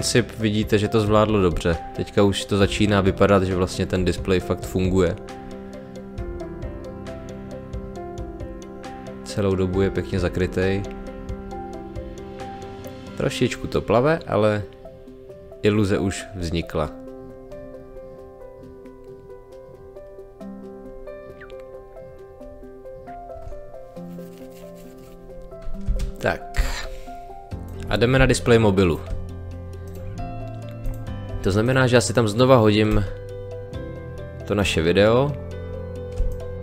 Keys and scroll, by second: 25.8 space, 36.2 space.